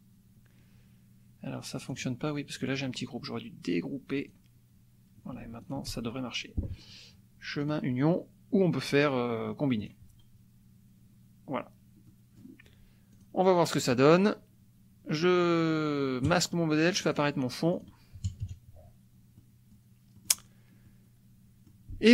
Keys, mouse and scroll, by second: 1.9 click, 2.8 click, 4.2 click, 5.7 shift+click, 7.6 click, 9.9 click, 12.1 click, 13.1-14.4 drag, 16.2 click, 17.0 click, 17.7 click, 18.2 KP_Subtract, 19.4 click, 20.3 click, 20.8-21.8 drag.